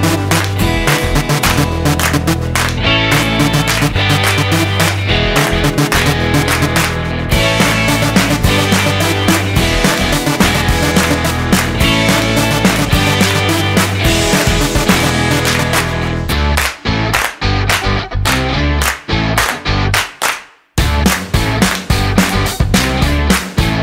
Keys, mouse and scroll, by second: 0.7 n.